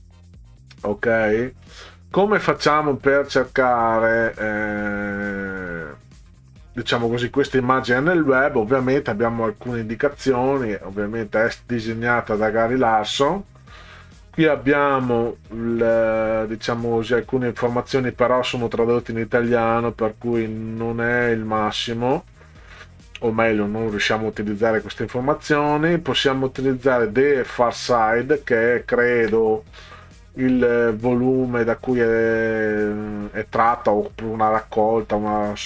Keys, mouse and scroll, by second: 0.2 click, 28.9 ctrl+scroll up 2, 30.1-30.6 scroll down 4.